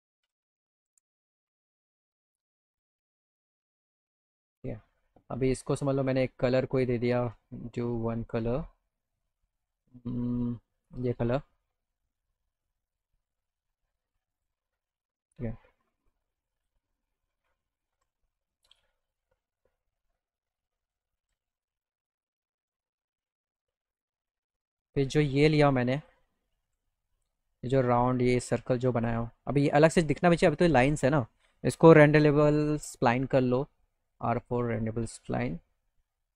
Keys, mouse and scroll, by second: 0.3 p, 0.9 z, 4.6 click, 6.8 click, 10.4 click, 10.9 click, 12.9 click, 14.4 click, 16.0 click, 16.5 click, 17.7 alt+click, 18.2 click, 19.2-21.2 drag, 22.0 click, 23.3 right click, 23.9 click, 24.7 click, 24.9 click, 26.0 ctrl+click, 26.8 z, 28.0 click, 28.8 alt+click, 31.0 click, 32.1 r, 34.7 click.